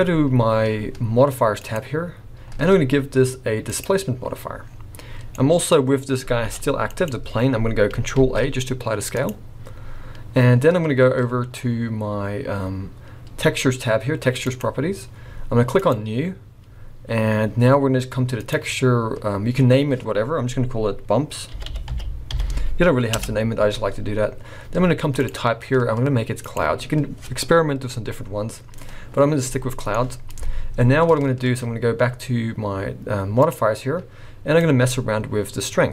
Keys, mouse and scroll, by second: 1.6 click, 4.6-5.3 scroll down 5, 5.3 middle click, 6.5 g, 8.2 ctrl+a, 14.4 click, 15.7 click, 18.4 click, 25.2 click, 29.5 middle click, 29.9-32.5 scroll up 4, 33.4 click, 34.6 click.